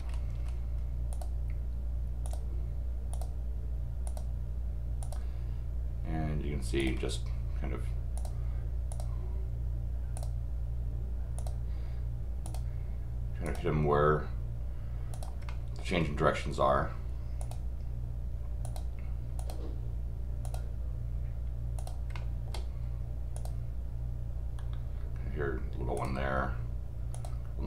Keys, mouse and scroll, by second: 0.3 scroll down 1, 1.1 click, 2.2 click, 3.1 click, 4.0 click, 5.0 click, 6.8 click, 8.1 click, 8.9 click, 10.1 click, 11.4 click, 12.4 click, 13.4 click, 15.1 click, 15.5 middle click, 17.4 click, 18.6 click, 19.4 click, 20.4 click, 21.8 click, 22.1 middle click, 23.3 click, 25.9 click, 27.1 click.